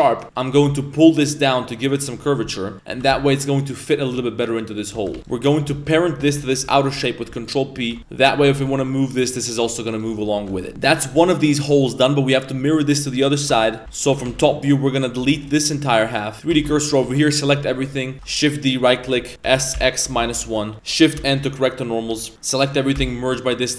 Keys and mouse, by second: 0.2 middle click, 0.2 g, 2.4 middle click, 4.9 a, 5.8 shift+right click, 6.6 ctrl+p, 7.9 a, 8.3 g, 9.6 right drag, 9.9 right click, 10.1 middle drag, 10.4 a, 10.5 a, 10.6 middle click, 13.5 middle drag, 13.8 Tab, 13.8-14.3 typing, 16.3-17.0 typing, 18.1 shift+d, 19.4 s, 21.2 shift+n, 22.1 a, 22.9 m.